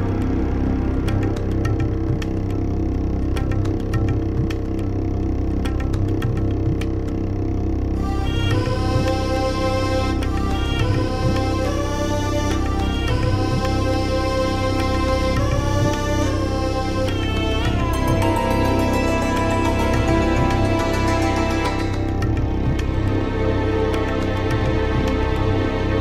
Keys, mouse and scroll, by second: 6.5 shift+Return, 8.0 l, 9.2 l, 11.2 alt+shift+l, 12.0 h, 12.4 BackSpace, 13.4-17.6 typing, 18.8 shift+Return, 20.0 BackSpace, 21.1 BackSpace, 22.4 d, 22.8 Return, 23.8 BackSpace.